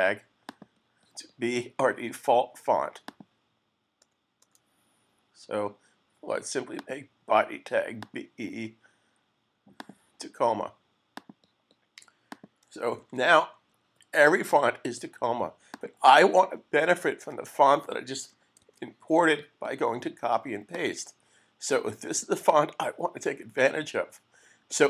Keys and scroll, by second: 13.0 super+s, 17.2 Return, 18.6 super+s.